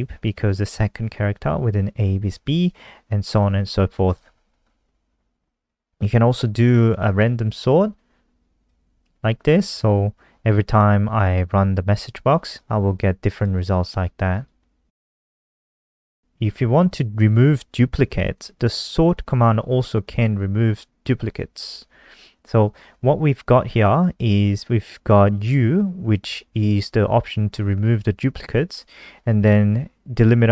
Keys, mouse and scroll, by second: 3.9 click, 4.5-5.5 scroll down 3, 5.5 click, 6.7 ctrl+c, 7.2 click, 8.7 ctrl+v, 8.9 ctrl+s, 9.6 F5, 12.5 click, 15.0 ctrl+c, 15.2 click, 15.8 click, 18.3 ctrl+v, 22.8 ctrl+s, 25.2 click.